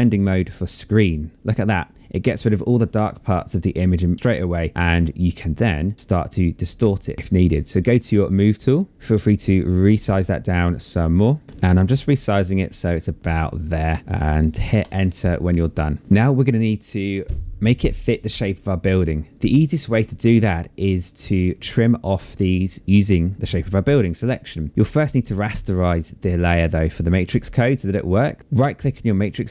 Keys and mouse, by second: 7.1 click, 10.1 click, 14.0 Return, 15.0 click, 28.7 right click.